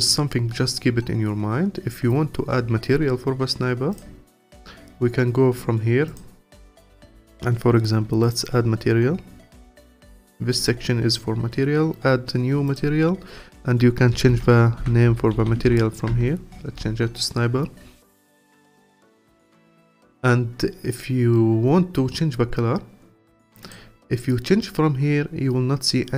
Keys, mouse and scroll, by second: 0.5-3.6 scroll up 1, 3.9 click, 6.1 click, 8.2-11.4 drag, 12.7-15.8 drag, 18.0-19.1 scroll down 3, 19.1-19.6 scroll down 1, 23.6 click.